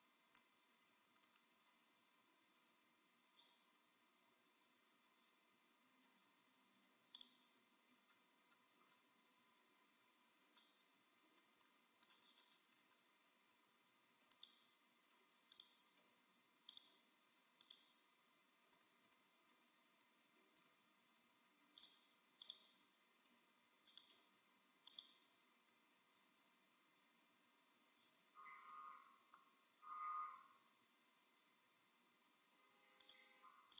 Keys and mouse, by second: 1.9 KP_1, 3.3 z, 3.9 z, 5.0 Tab, 5.6 Tab, 5.8-6.9 drag, 5.8 g, 7.3 click, 8.0-9.1 right drag, 11.3-13.6 middle drag, 14.4-16.1 right drag, 14.8 middle click, 15.6-19.3 drag, 21.8-24.1 drag, 25.0-26.6 drag, 30.3 KP_0, 33.1-33.7 drag.